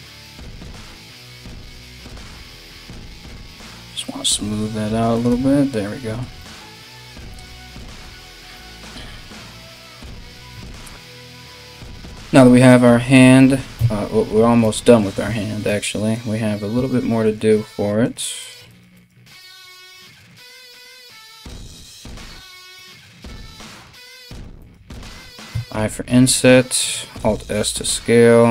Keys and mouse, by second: 0.5 ctrl+right click, 1.2 ctrl+right click, 2.1 alt+q, 4.0 g, 4.9 Tab, 6.9 KP_1, 10.1 KP_1, 13.3 Tab, 15.7 right click, 16.5 shift+right click, 16.8 shift+right click, 17.1 shift+right click, 17.6 shift+right click, 18.0 shift+right click, 18.2 shift+right click, 18.5 shift+right click, 19.8 shift+right click, 20.1 shift+right click, 20.5 shift+right click, 20.8 shift+right click, 21.1 shift+right click, 21.4 shift+right click, 21.8 shift+right click, 23.3 shift+right click, 23.4 shift+middle click, 23.9 shift+right click, 24.0 shift+middle click, 24.2 shift+right click, 24.3-28.5 shift+middle drag, 26.8 alt+s.